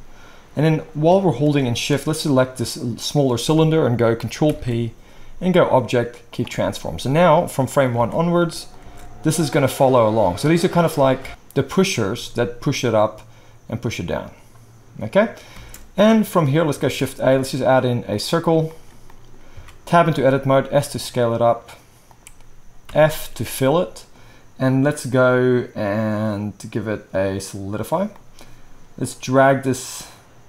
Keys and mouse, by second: 4.4 ctrl+p, 8.0 alt+a, 8.8 space, 11.2 space, 12.1 space, 15.5 space, 16.8 shift+a, 19.5 Tab, 20.2 s, 22.0-25.0 right drag, 22.8 f, 25.0-30.4 middle drag.